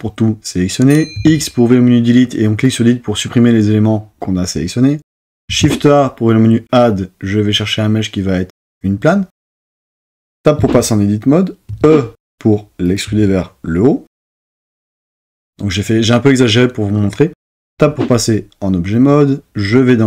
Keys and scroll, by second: 1.1 x, 5.4 shift+a, 10.6 Tab, 11.7 e, 17.6 Tab.